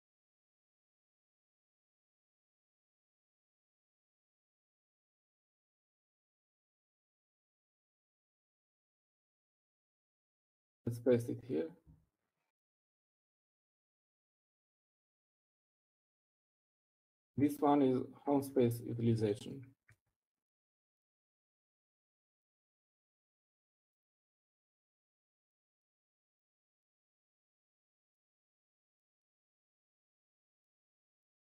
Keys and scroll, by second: 6.2 Escape, 7.0 Up, 7.4 Up, 9.0-9.9 typing, 10.4-11.2 Down, 11.4 Down, 11.5 Down, 12.2 Down, 12.5 Up, 13.4 Up, 14.4 p, 21.0 Down, 21.5 Down, 22.4 Right, 22.4 Up, 23.0 Right, 23.4 Right, 23.5 Right, 23.9 Right, 24.4 Right, 25.0 Right, 26.0 typing.